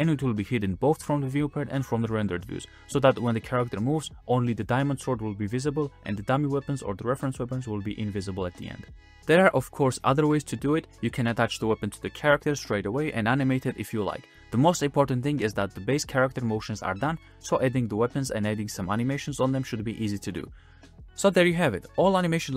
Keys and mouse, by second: 0.9 middle click, 1.2 space, 1.8 space, 2.0-2.4 middle drag, 2.7 middle drag, 2.7 space, 3.6 middle click, 4.0-7.1 typing, 4.9 middle drag, 6.8 drag, 7.2 drag, 7.8 shift+click, 8.0-8.4 drag, 8.0-8.4 middle drag, 8.0-8.4 right drag, 9.2-9.6 drag, 9.2-9.6 middle drag, 9.2-9.6 right drag, 9.6 space, 10.7 click, 10.7 middle click, 10.7 right click, 11.7 click, 11.7 middle click, 11.7 right click, 12.1-13.4 drag, 12.1 middle drag, 12.1 right drag, 13.9 click, 14.3 click, 14.6 click, 15.0 space, 17.2 drag, 18.5 space, 18.9 click, 21.5 space, 21.6 shift+click, 21.6 shift+right click, 21.7 space, 22.0 click, 22.5 click, 22.5 space.